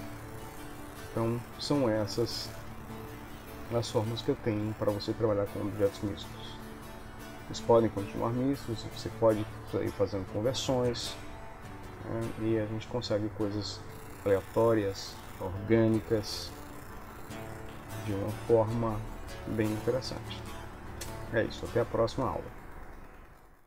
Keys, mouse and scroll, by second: 1.2 ctrl+middle click, 3.7 shift+middle click, 5.8 ctrl+middle click, 5.8 KP_1, 8.5 ctrl+s, 14.4 middle click, 15.2 middle click, 18.9 ctrl+s, 19.5 middle click.